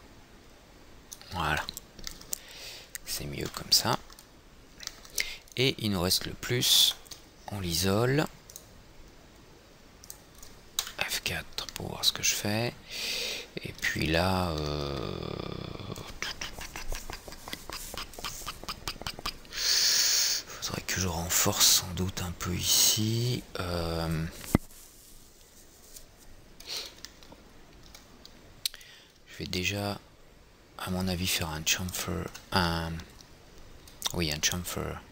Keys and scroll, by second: 4.1 F3, 11.3 F4.